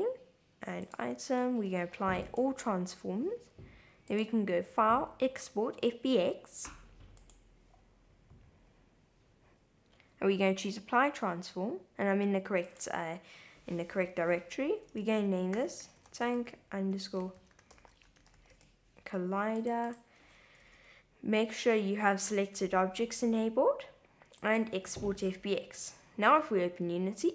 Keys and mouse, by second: 0.8 click, 1.5 super+a, 4.1-7.4 drag.